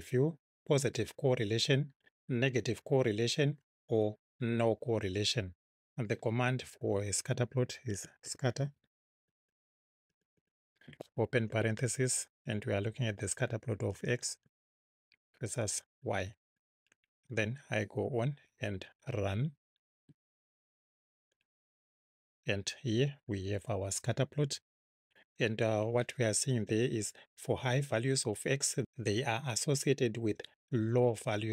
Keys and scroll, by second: 7.7-10.1 typing, 11.5 shift+9, 13.9 x, 14.4 ', 15.6 y, 17.1 Right.